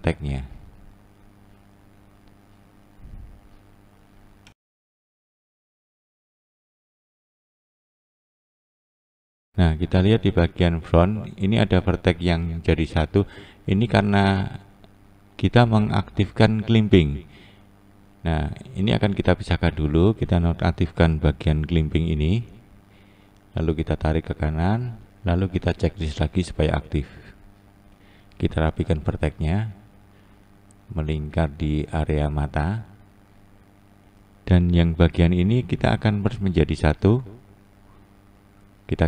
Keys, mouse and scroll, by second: 1.0 click, 1.4 click, 3.0 click, 3.5 click, 5.1 click, 5.5 click, 7.4 click, 9.8 click, 11.5 click, 13.0 click, 14.5 click, 15.8-17.1 scroll up 1, 17.1-17.8 scroll up 2, 17.8-18.4 scroll down 1, 18.8 click, 22.4-23.9 drag, 25.6-26.7 drag, 28.2 click, 28.8 click, 31.9-32.3 scroll down 2, 32.3-34.4 scroll up 1, 34.5 click, 35.0 click.